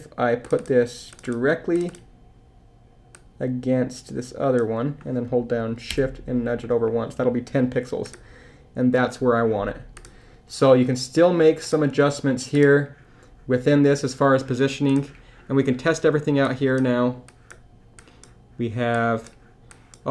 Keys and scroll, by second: 5.9 shift+Left.